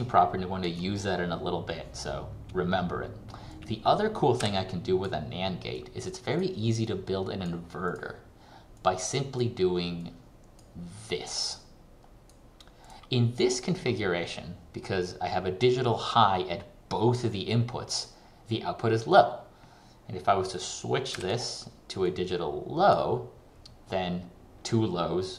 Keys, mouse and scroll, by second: 0.0 ctrl+click, 3.6 click, 21.2 alt+click.